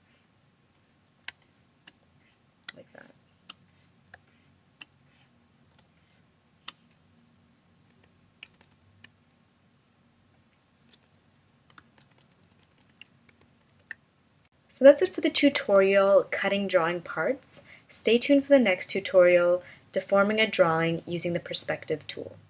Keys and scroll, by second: 0.8 space, 2.2 space, 3.7 space, 5.3 space, 7.9 shift+-, 11.5 super+-, 13.1 shift+m.